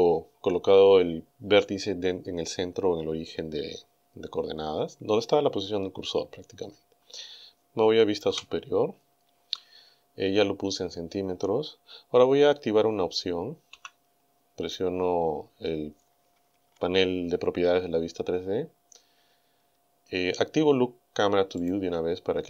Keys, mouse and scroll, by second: 8.3 KP_7, 13.7 n, 18.9-19.4 scroll down 2, 19.8-20.2 scroll up 2, 21.6 click.